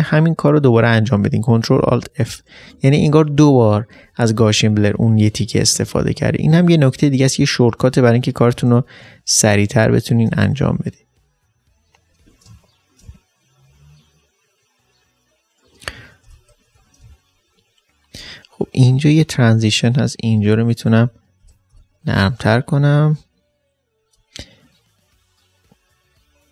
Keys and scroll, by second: 1.0 ctrl+alt+f, 1.8 ctrl+alt+f, 2.5 typing, 8.7 ctrl+alt+f, 9.4 ctrl+alt+space, 12.1 ctrl+d, 12.4 ctrl+space, 16.2 ctrl+alt+f, 16.7 d, 17.0 space, 21.0 typing, 21.4 ctrl+alt+f, 22.1-23.3 typing.